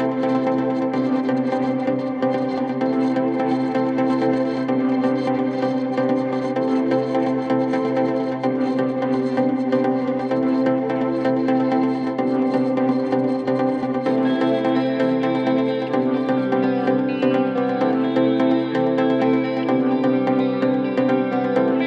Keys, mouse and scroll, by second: 0.1-2.9 shift+drag, 3.6-5.5 shift+drag, 5.6-7.0 alt+scroll down 4, 7.0-7.9 alt+scroll down 1, 7.9-8.9 scroll up 2, 8.9 scroll up 1, 9.5 click, 11.3 ctrl+z, 12.5-15.8 drag, 19.3-19.7 alt+scroll up 1, 19.9 click, 21.0-21.8 drag.